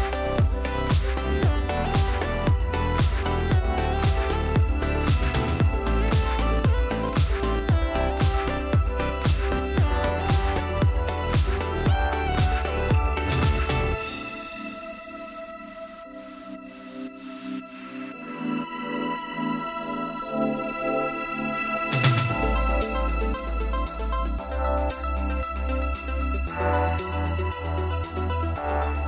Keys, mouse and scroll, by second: 0.4-1.3 shift+scroll up 3, 1.3 scroll down 1, 1.3-2.1 scroll up 2, 2.3 shift+click, 2.8 click, 3.1 click, 3.5 click, 3.9 click, 4.2 click, 4.6 click, 5.0 5, 6.8 click, 8.0 click, 9.7 click, 10.6 ctrl+g, 11.9-12.3 ctrl+scroll up 2, 12.5-12.9 ctrl+scroll down 2, 14.0 5, 15.9 shift+click, 18.2 ctrl+z, 23.6 click, 24.3 click, 24.9-26.5 drag, 27.0 ctrl+z, 28.1 ctrl+d.